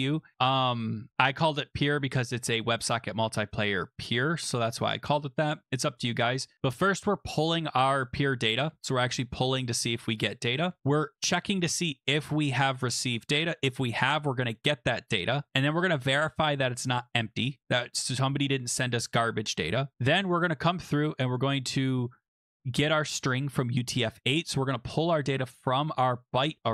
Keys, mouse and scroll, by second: 4.2 click, 6.3-7.5 scroll, 8.2 click, 13.1 click, 15.5 click, 17.9 click, 24.3 click.